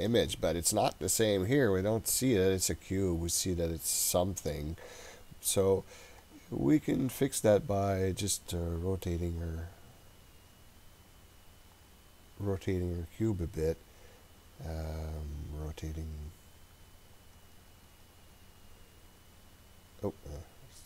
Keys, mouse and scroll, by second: 6.2 click, 11.8 click, 17.2 click, 17.4 click, 17.7 click, 17.9 click, 18.3 click.